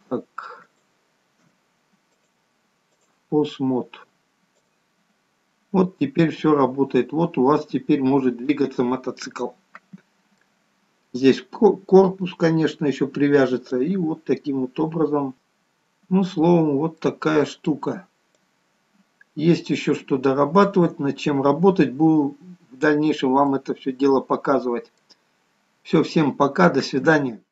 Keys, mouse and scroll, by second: 0.9 shift+click, 2.4 click, 4.2 shift+click, 5.0 click, 9.1-9.5 scroll up 2, 9.5 middle click, 10.9-11.9 scroll down 1, 12.2 scroll down 2, 14.0 click, 16.0-17.0 scroll up 4, 17.0-18.7 scroll down 2, 17.3 middle click, 18.7 click, 23.3-23.9 scroll down 3, 23.9 middle click, 25.7-26.3 scroll up 2, 26.3 middle click.